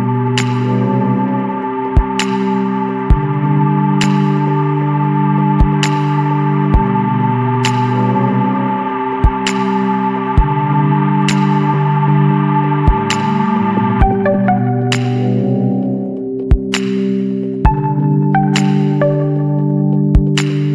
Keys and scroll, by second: 0.0 Return, 12.9 ctrl+=, 13.0 space, 18.6 ].